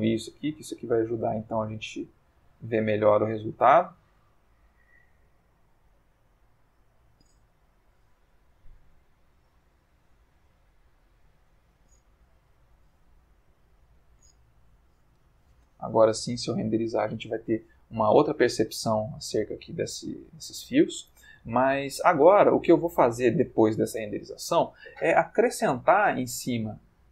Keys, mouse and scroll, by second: 0.2 click, 0.6 g, 2.3 click, 4.4 s, 5.7 click, 6.5 click, 7.5 g, 7.9 z, 9.7 click, 9.9 g, 11.7 click, 12.4 g, 12.8 z, 14.3 click, 16.0 F12.